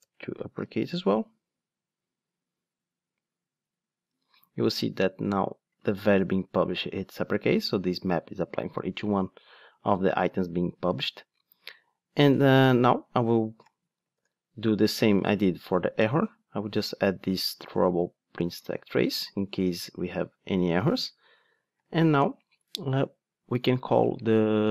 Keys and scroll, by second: 0.0 Return, 0.8 ctrl+shift+d, 14.3 super+p, 18.8 super+c, 20.8 super+v.